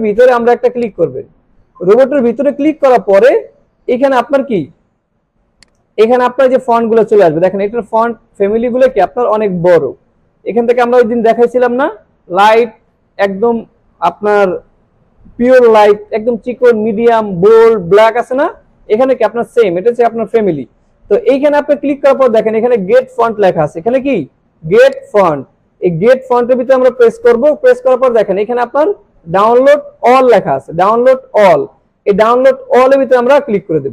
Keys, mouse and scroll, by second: 0.8 click, 3.0 scroll down 1, 3.9 scroll up 1, 5.6 click, 6.0 scroll down 1, 7.4-8.0 scroll down 2, 8.5 scroll down 1, 9.1 scroll up 1, 9.7 scroll up 1, 10.8 scroll up 1, 16.2 scroll up 1, 18.4 scroll up 1, 19.2 scroll up 1, 19.7 scroll up 1, 20.8 scroll down 1, 21.6 scroll up 1, 22.2 scroll up 1, 25.0 click, 32.8 click.